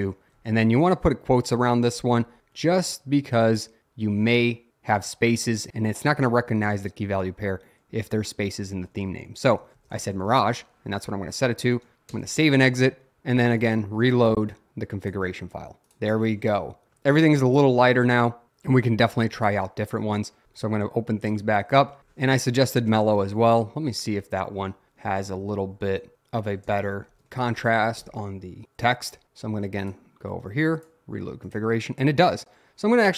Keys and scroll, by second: 0.4 shift+", 2.2 Left, 9.0-11.9 typing, 11.0 Escape, 12.1 Return, 22.0-24.4 typing, 22.3 Right, 25.1 Left, 25.3 Left, 26.4-28.0 typing.